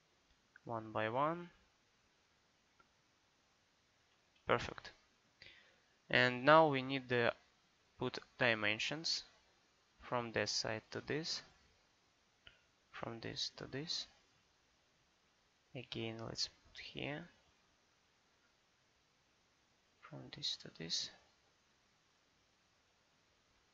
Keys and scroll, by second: 4.4 Escape, 23.5 Escape.